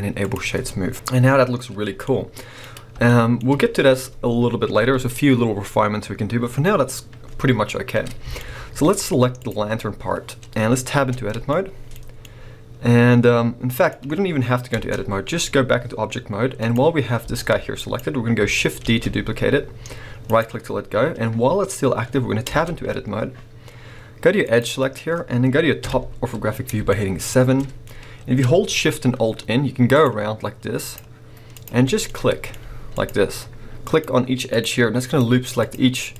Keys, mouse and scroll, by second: 2.0-9.4 middle drag, 6.6-8.4 scroll down 2, 9.4 click, 9.6-11.0 scroll down 2, 11.0 Tab, 11.5-14.8 shift+middle drag, 14.8 Tab, 15.2-16.6 scroll down 2, 16.6 click, 17.2 g, 17.9 right click, 18.8 shift+d, 20.4 right click, 22.5 Tab, 24.4 click, 25.8 KP_7, 26.9 shift+middle click, 27.6-28.2 scroll up 2, 29.9 alt+shift+click, 30.8 alt+shift+click, 31.6 alt+shift+click, 32.0 shift+middle click, 33.0 alt+shift+click, 33.8 alt+shift+click, 34.5 alt+shift+click, 35.1 alt+shift+click.